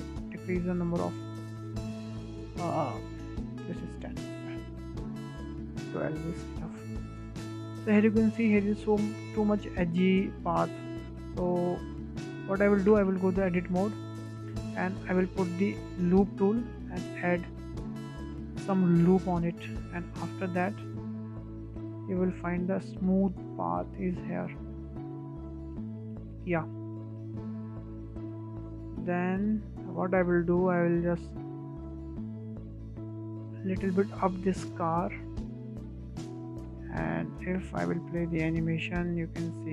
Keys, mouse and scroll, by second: 0.2-3.2 drag, 3.9 click, 4.9 scroll down 2, 5.1-6.3 shift+middle drag, 6.3-7.7 drag, 8.5-8.8 scroll up 1, 8.8-9.1 shift+middle drag, 9.1-9.5 scroll up 5, 9.5 shift+middle click, 10.3-11.1 scroll down 5, 11.1 middle drag, 11.3-12.0 scroll up 4, 11.7 shift+middle drag, 12.0-12.5 middle drag, 12.5 click, 13.7 Tab, 13.9 scroll down 5, 14.3 shift+middle drag, 14.6-14.9 scroll up 4, 14.9 shift+middle click, 15.8 click, 16.2-17.9 shift+middle drag, 17.9-20.9 drag, 21.8 click, 22.5 Tab, 22.8-23.2 scroll down 3, 23.2-23.6 shift+middle drag, 23.6-24.3 scroll up 4, 24.3-24.8 scroll up 1, 24.8-25.9 middle drag, 25.9 scroll down 3, 26.2-27.4 middle drag, 27.4-27.7 scroll up 2, 27.7 shift+middle click, 28.5-28.8 scroll up 2, 28.8 shift+middle click, 29.2-29.6 scroll up 3, 29.6-30.1 shift+middle drag, 30.1-30.7 scroll up 4, 30.1 middle click, 30.7-31.1 shift+middle drag, 31.1 scroll down 1, 31.2-31.7 middle drag, 31.7-32.0 scroll up 2, 32.0-32.7 shift+middle drag, 32.7 click, 33.0-33.8 scroll up 2, 33.8 click, 36.7-37.5 scroll down 11, 37.5-37.8 middle drag, 37.8-38.3 scroll down 3, 38.3-39.6 shift+middle drag, 39.6 space.